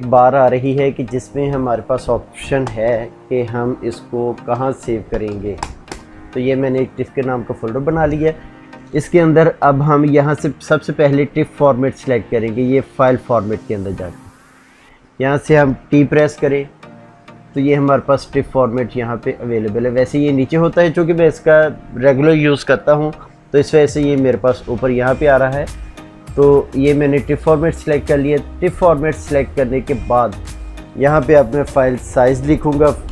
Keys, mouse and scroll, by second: 1.2 click, 2.5 ctrl+shift+n, 4.4-5.9 typing, 14.6 click, 16.0 t, 27.1 click, 30.5 click.